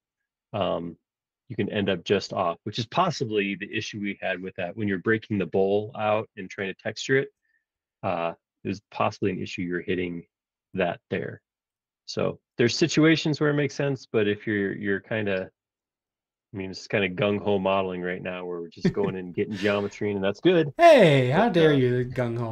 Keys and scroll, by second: 7.7 Escape, 12.8 space.